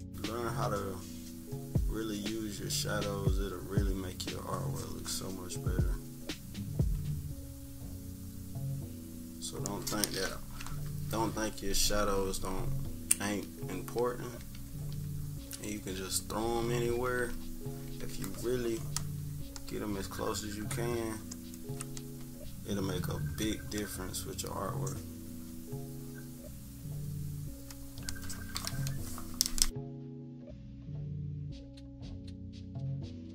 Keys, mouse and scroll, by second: 3.5-4.8 drag, 5.8-6.9 drag, 7.6-9.5 drag, 12.0 -, 12.2 -, 12.5 -, 12.8 -, 13.1 scroll down 2, 14.2 =, 14.4 scroll up 2, 14.5 =, 16.2-16.5 scroll up 2, 16.2-18.0 typing, 16.9 scroll down 1, 17.3-17.8 scroll up 4, 18.2 scroll up 1, 19.5-27.9 drag, 29.6 -, 29.9 =, 30.6 scroll down 1, 30.8 =, 31.0 scroll up 1, 31.4 click, 32.4 -, 33.0 =, 33.1 scroll down 1.